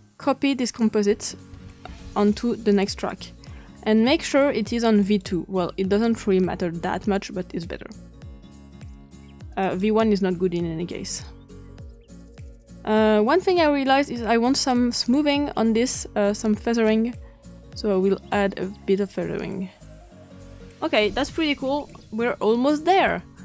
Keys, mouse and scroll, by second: 1.5 ctrl+c, 1.8 ctrl+v, 2.3 click, 3.0 click, 3.4 click, 4.2-5.6 drag, 6.1-6.9 scroll up 1, 6.9-8.2 drag, 6.9-7.4 scroll up 1, 9.5 click, 11.6-13.9 drag, 14.9 click, 16.7 click, 18.9 scroll down 2, 19.5-20.4 scroll down 1, 20.4 click, 23.3 ctrl+scroll down 2.